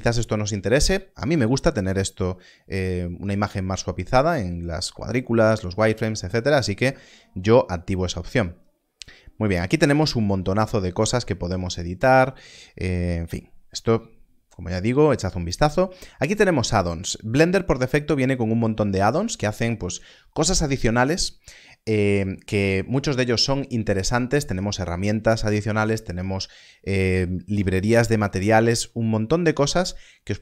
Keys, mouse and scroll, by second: 9.6 click, 12.7-13.2 scroll down 1, 13.2-13.8 scroll up 1, 14.8 click, 17.4-19.1 scroll down 1, 27.5-29.8 scroll down 1, 29.8-30.2 scroll up 1.